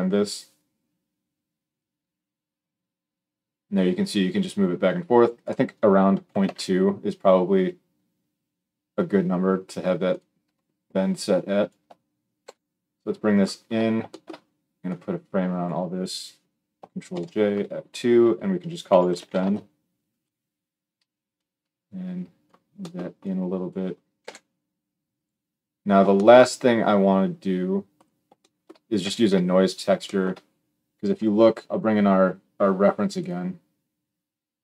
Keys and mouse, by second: 10.0 middle click, 10.9-13.2 drag, 12.2 g, 13.2-14.6 middle drag, 14.6-25.1 drag, 16.9 ctrl+j, 17.3 F2, 24.0 g, 25.9-27.7 shift+middle drag, 27.7 click, 27.8 middle click, 28.5-34.6 middle drag.